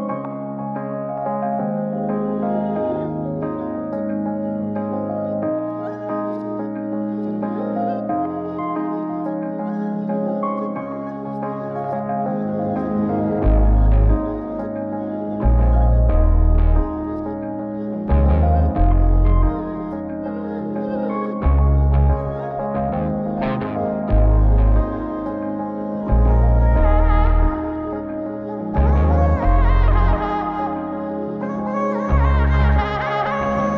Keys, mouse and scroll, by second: 0.6 click, 1.1 click, 1.9 click, 4.0 click, 5.7 click, 8.0 click, 9.9 ctrl+right click, 11.5 click, 13.7 click, 15.4-16.1 drag, 16.5 click, 18.1 click, 20.7-21.6 drag, 22.3-22.8 drag, 26.4-27.3 drag, 28.6 click.